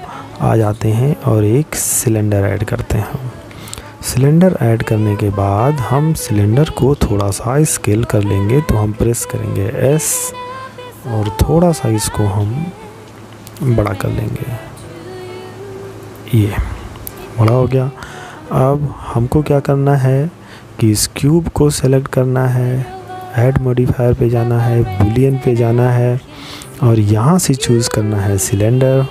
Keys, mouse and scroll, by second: 7.5 s, 18.8 right click, 20.7 click, 24.2 click.